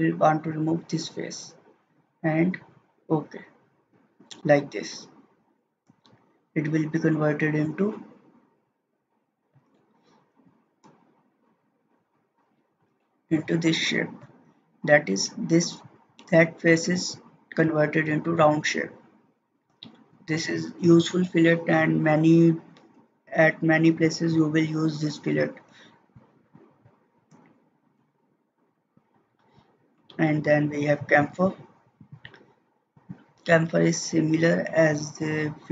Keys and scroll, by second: 27.9 ctrl+z.